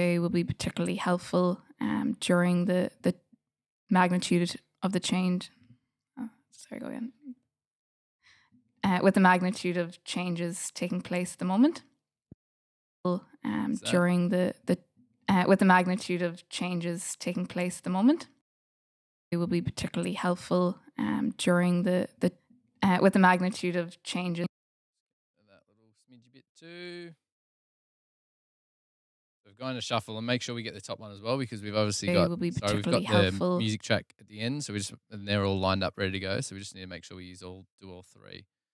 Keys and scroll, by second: 13.9 f, 17.9 space, 18.7 space, 22.7 super+z, 23.4 super+z, 23.9 space.